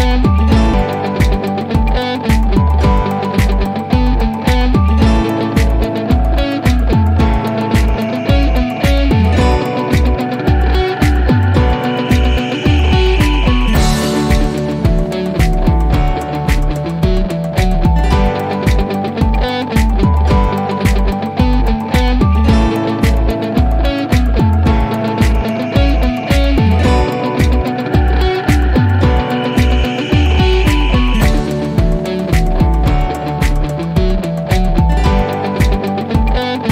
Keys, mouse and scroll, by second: 1.1 right click, 2.1 l, 3.3-3.7 scroll down 1, 5.4-9.1 drag, 11.3-12.6 scroll up 1, 12.6-14.7 drag, 15.3-16.3 scroll down 1, 16.3 p, 17.9-20.9 alt+middle drag, 35.1 t, 36.2-36.7 scroll down 1.